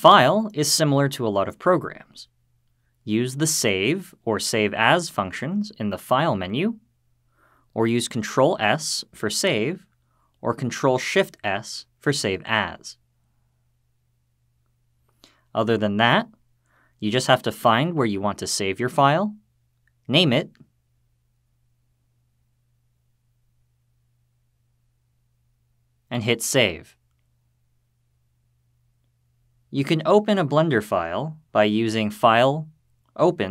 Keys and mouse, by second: 2.8-7.4 drag, 8.2 ctrl+s, 10.6 ctrl+shift+s, 31.4-33.5 drag.